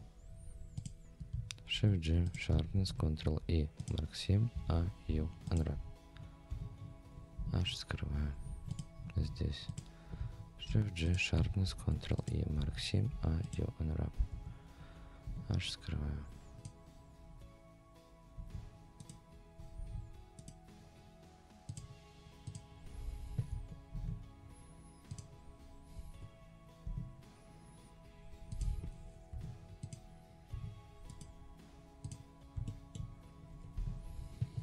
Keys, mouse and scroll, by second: 0.8 click, 1.7 shift+g, 2.7 ctrl+e, 4.5 a, 5.0 u, 6.2-7.0 scroll down 4, 6.5 Tab, 7.3 h, 7.6-8.1 scroll down 2, 8.1-8.5 scroll up 3, 8.7 click, 9.0 scroll up 1, 9.1 Tab, 9.7 click, 10.7 shift+g, 11.6 ctrl+e, 12.6 a, 13.1 u, 14.3 Tab, 15.2 h, 15.7-16.0 scroll down 1, 16.2 scroll up 2.